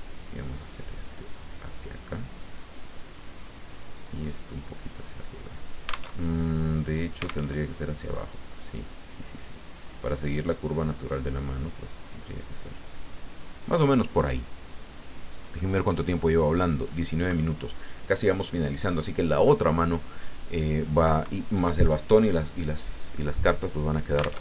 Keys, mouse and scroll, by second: 3.7-5.8 drag, 6.2 alt+Tab, 7.5 alt+Tab, 8.3 click, 9.3 click, 9.8-14.0 drag, 15.5 click, 16.7 click.